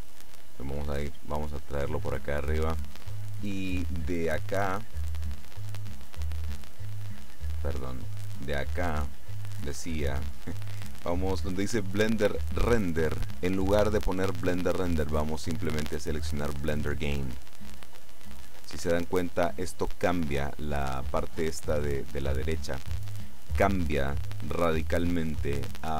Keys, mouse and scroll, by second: 1.7-3.2 middle drag, 5.6 click, 7.1 click, 8.4 click, 9.2 click, 17.5 click.